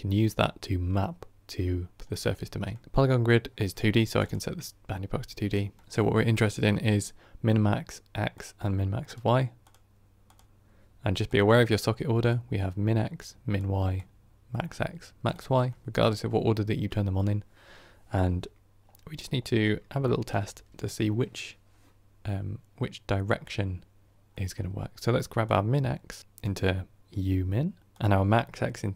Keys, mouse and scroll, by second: 4.1-5.8 drag, 8.2 click, 8.9 click, 9.5 click, 10.2 click, 18.2-18.7 middle drag, 18.7-19.9 scroll up 7, 19.9-26.4 shift+middle drag, 26.4-28.9 drag.